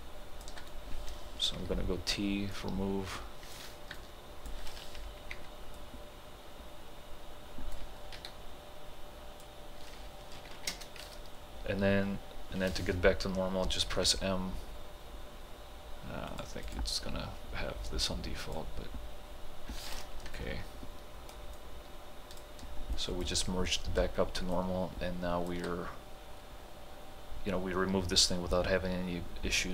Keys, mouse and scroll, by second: 1.6 t, 2.6-4.0 drag, 4.0-5.3 alt+drag, 5.3 y, 5.8-8.2 drag, 8.2 t, 8.3-10.5 drag, 10.5 ctrl+h, 10.7 space, 13.9 m, 16.3 click, 20.3-28.2 alt+drag.